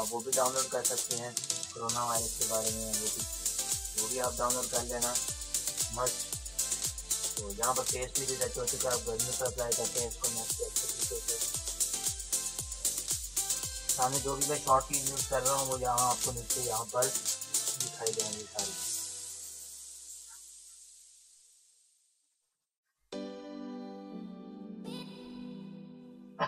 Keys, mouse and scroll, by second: 0.1 space, 0.2 click, 0.5 [, 0.8-4.0 drag, 5.2 space, 5.4 click, 5.8 space, 6.0 click, 6.5 ctrl+-, 7.0-9.5 typing, 7.1 click, 7.9 click, 13.7 [, 13.8 [, 14.1 [, 14.2 click, 17.6 ], 17.9 click, 20.3 z, 23.4 typing, 24.1 click, 25.0-25.4 typing, 25.8-26.4 drag.